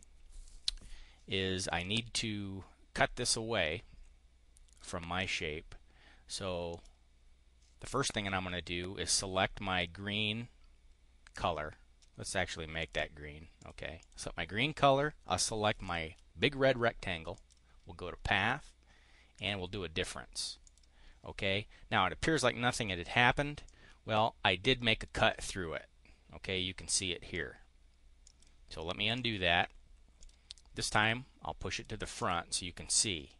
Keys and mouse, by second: 6.7 click, 12.7 click, 13.5 click, 13.9 click, 15.8 shift+click, 17.3 click, 19.3 click, 20.6 click, 23.6-27.3 drag, 28.2 click, 29.1 click, 30.1 click, 31.7 click, 32.1 click.